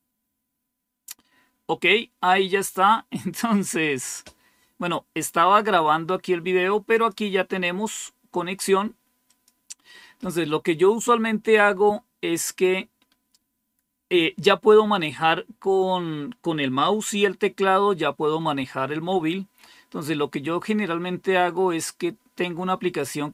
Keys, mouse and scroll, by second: 6.8 click, 9.2 click.